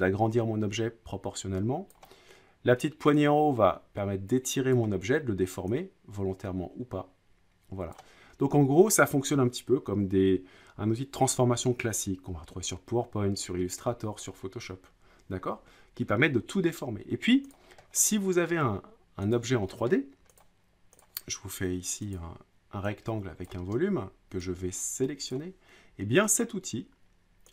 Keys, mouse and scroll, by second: 1.9-3.0 drag, 4.7 click, 7.9 click, 17.5 click, 17.9-18.6 scroll, 18.6 scroll down 4, 19.3 click, 19.9 middle click, 20.4 click, 21.0 click, 23.4 click, 25.3 click.